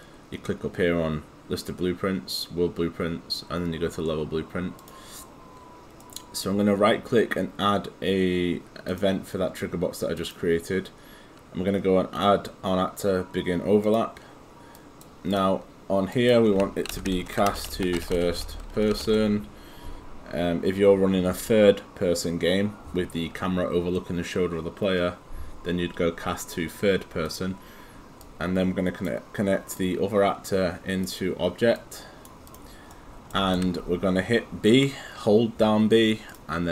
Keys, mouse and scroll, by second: 4.8 click, 6.0 right click, 8.9 click, 14.3 click, 16.7-19.6 typing, 27.3 click, 32.9 right click, 33.8 b, 36.3 click.